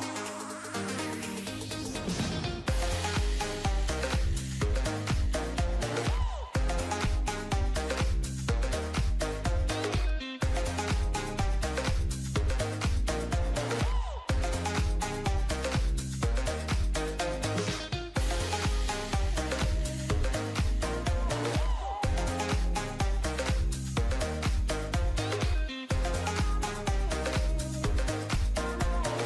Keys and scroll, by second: 5.4 ctrl+=, 9.2 ctrl+z, 15.5 ctrl+-, 16.0 ctrl+=, 27.1 ctrl+0.